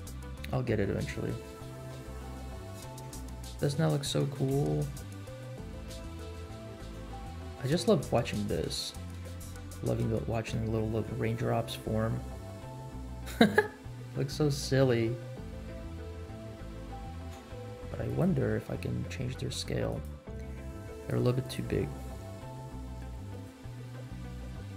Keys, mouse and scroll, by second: 0.7 space, 1.0-1.5 scroll up 2, 2.9-3.6 scroll up 2, 3.8 shift+middle click, 4.5 space, 4.8 middle click, 5.4 scroll down 1, 5.7 shift+middle click, 6.4 middle click, 7.1 space, 7.4 middle click, 7.7 shift+middle click, 8.4 scroll up 2, 8.8 shift+middle click, 10.1 scroll down 1, 10.7-11.0 shift+middle drag, 11.3 scroll up 1, 11.9 middle click, 17.3 space, 18.0 click, 19.8 click, 20.9 click, 21.4 click, 23.3 click.